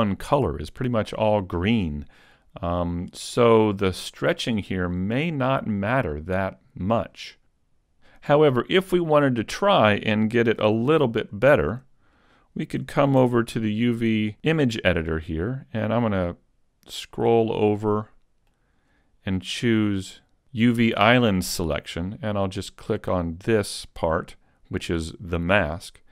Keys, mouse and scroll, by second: 4.4-5.0 scroll down 2, 5.0 middle click, 9.5-9.8 scroll down 6, 11.0 a, 13.2 shift+middle click, 13.2 a, 23.3 click, 23.3 right click.